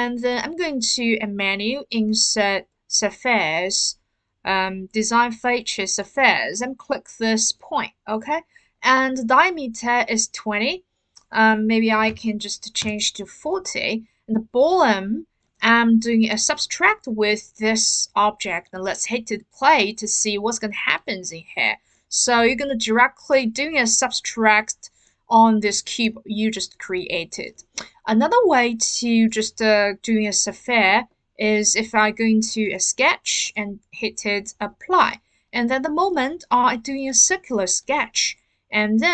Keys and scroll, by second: 11.9 typing, 12.8 Return.